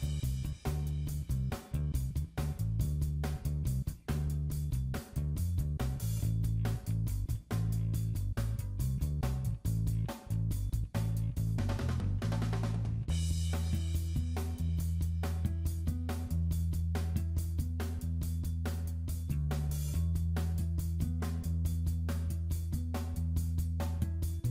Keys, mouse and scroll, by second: 0.2 ctrl+v, 3.7 click, 4.7 scroll down 2, 4.9 shift+middle click, 6.1 click, 6.6 click, 8.7 KP_7, 9.3 shift+middle click, 10.0 click, 10.7 shift+middle click, 10.9 scroll up 4, 11.4 shift+middle click, 12.0 middle click, 12.4 shift+middle click, 12.6 scroll up 3, 13.1 click, 13.8 s, 14.9 click, 15.2 middle click, 16.2 ctrl+click, 17.4 middle click, 18.1 shift+middle click, 18.3 middle click, 19.1 s, 20.0 click, 20.5 click, 20.9 middle click, 21.5 click, 22.5 middle click.